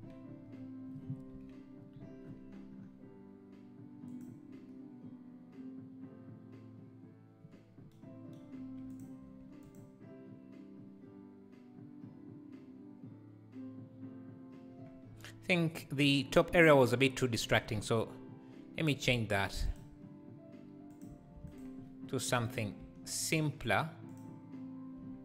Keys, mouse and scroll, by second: 4.2 click, 9.4 x, 16.9 click, 17.8 Tab, 19.1 3, 19.6 click, 21.0 click, 21.4 shift+d, 22.3 p, 22.8 Tab, 23.2 click, 24.1 click, 25.0 Tab.